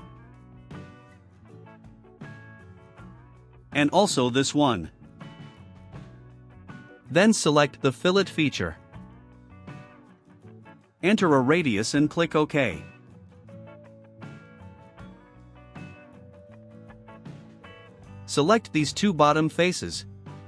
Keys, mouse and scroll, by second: 0.3 click, 2.9-4.0 drag, 6.0 ctrl+click, 9.1 click, 11.2 0, 11.8 click, 14.9 click, 19.2 scroll down 2, 19.8 click, 20.2 scroll down 2.